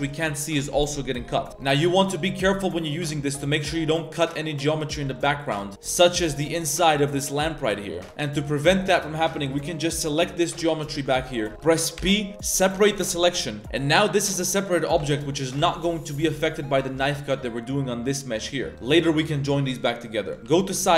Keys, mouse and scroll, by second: 2.5 z, 5.1 middle click, 5.7 z, 6.1 1, 6.4 alt+right click, 6.8-7.9 middle drag, 7.9 click, 8.0-8.4 middle drag, 8.0 a, 9.4 alt+right click, 9.7-10.3 alt+shift+right drag, 10.5-11.0 alt+shift+drag, 11.2-11.5 middle drag, 12.0 p, 13.3 middle drag, 14.1 Tab, 14.5 Tab, 14.6 middle click, 15.0 Tab, 15.4 click, 15.6 Tab, 15.8 middle drag, 16.1 z, 16.8 middle click, 17.0 z, 17.2 middle drag, 18.2-18.5 middle drag, 18.7 right click, 18.9 Tab, 19.0 right click, 19.6-20.0 middle drag, 20.0 right click, 20.3 middle click, 20.4 KP_3, 20.8 Tab.